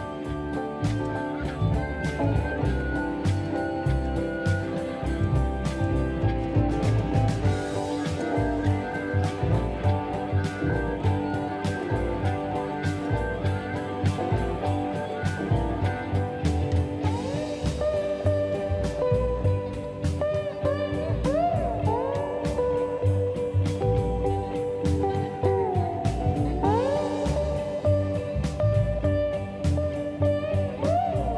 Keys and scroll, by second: 6.1 space, 7.8 space, 10.1 p, 12.7 shift+space, 12.9 Escape, 13.5 Delete, 17.1 ctrl+shift+g, 17.6 Escape, 20.9 shift+x, 25.3 shift+s, 27.7 space, 29.1 Delete, 29.7 Delete.